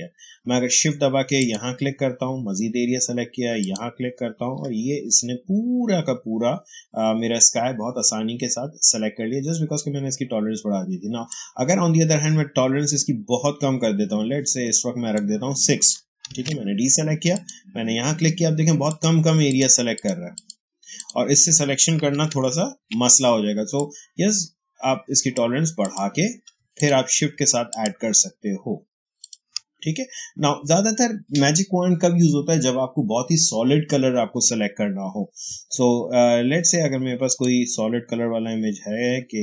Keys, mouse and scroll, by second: 0.4 click, 1.3 shift+click, 11.2-16.2 drag, 16.2 ctrl+d, 17.2 click, 18.8 shift+click, 22.4 ctrl+d, 23.7-25.7 drag, 24.0 h, 26.7 shift+click, 37.2 click.